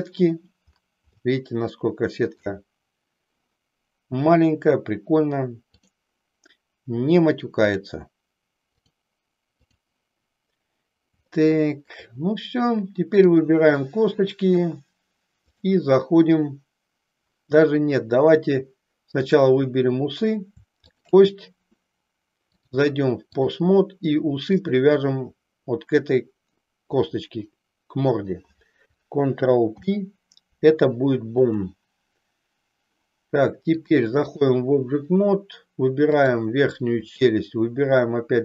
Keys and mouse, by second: 1.2-2.6 shift+middle drag, 5.7 click, 7.7 click, 9.9 click, 11.3 shift+middle click, 15.4-17.4 drag, 19.2 click, 20.8 shift+click, 22.4-23.6 drag, 29.6 ctrl+p, 33.7 click, 36.1 click.